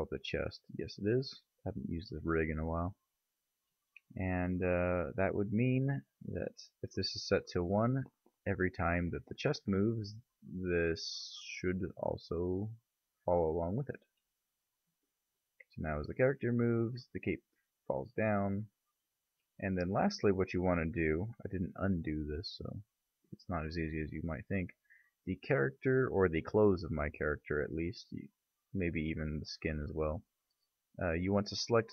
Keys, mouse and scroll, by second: 1.4-2.2 right drag, 2.2-7.5 middle drag, 12.9-13.6 drag, 19.4 click, 20.5 right click, 20.9-24.6 right drag, 24.4-29.4 middle drag, 30.0-30.3 middle drag.